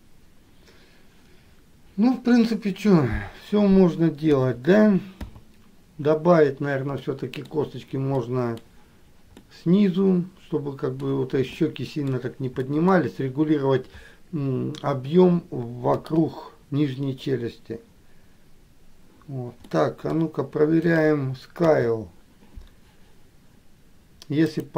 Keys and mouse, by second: 7.3 middle click, 8.5 middle click, 9.6-11.2 middle drag, 11.8 middle click, 12.9 middle click, 16.3 KP_1, 20.0 middle click, 21.1 click, 22.0 KP_3.